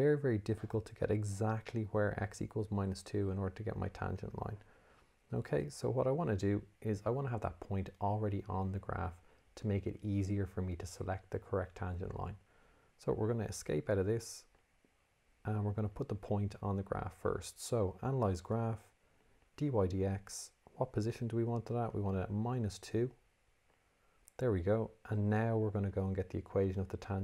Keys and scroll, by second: 13.7 Escape, 16.0 Menu, 18.1 6, 19.5 5, 22.8 2, 23.8 Return, 26.0 Menu.